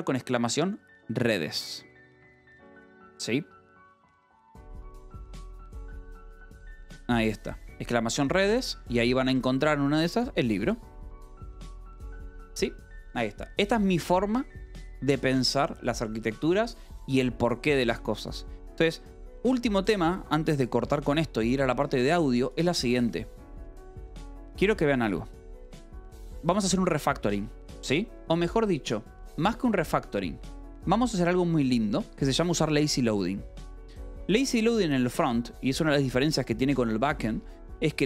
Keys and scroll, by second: 23.2-25.1 typing, 28.1 j, 28.6 k, 29.2 j, 29.6 d, 30.0 Escape, 30.9 k, 32.4 j.